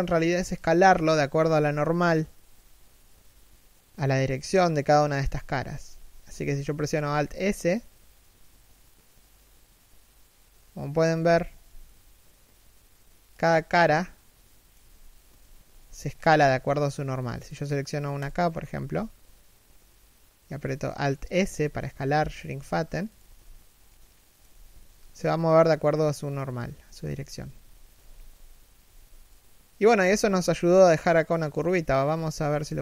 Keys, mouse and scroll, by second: 3.8 middle click, 4.8 KP_3, 5.5 KP_1, 6.9 alt+s, 10.8 z, 11.1 alt+s, 13.3 scroll down 1, 13.5 middle click, 14.9 3, 15.3 1, 15.8 scroll up 1, 16.0 alt+s, 17.9 right click, 18.3 alt+s, 22.8 z, 23.5 middle click, 24.1 z, 24.4 alt+s, 26.5 3, 26.9 z, 27.2 1, 27.6 z, 28.9 middle click, 30.0 scroll down 1, 30.3 middle click, 31.3 middle click, 31.6 3, 32.1 1.